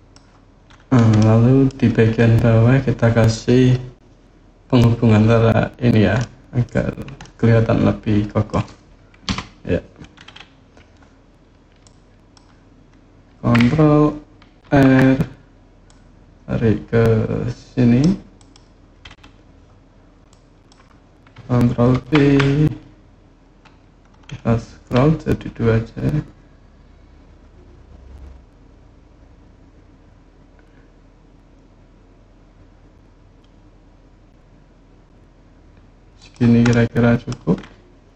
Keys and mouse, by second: 0.9 middle click, 6.0 middle click, 7.0-8.3 middle drag, 9.0 KP_3, 11.6 click, 14.4 ctrl+r, 18.1 click, 20.1 click, 21.7 ctrl+b, 35.9 click, 36.5 click.